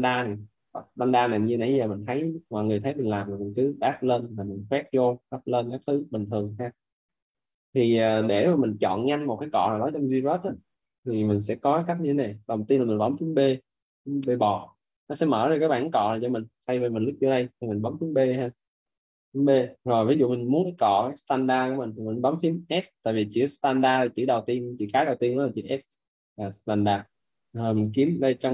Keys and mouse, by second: 0.6 click, 2.8 ctrl+z, 3.3 click, 4.0 alt+click, 5.1 click, 5.6 ctrl+z, 6.1 ctrl+z, 7.7 alt+right click, 14.5 b, 17.1 click, 19.0 b, 25.7 s.